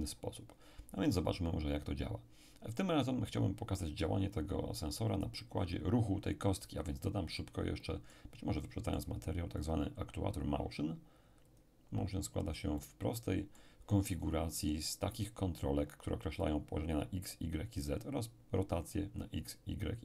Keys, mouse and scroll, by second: 7.3-10.7 middle drag, 9.6 click, 11.5 click, 12.8-14.5 middle drag.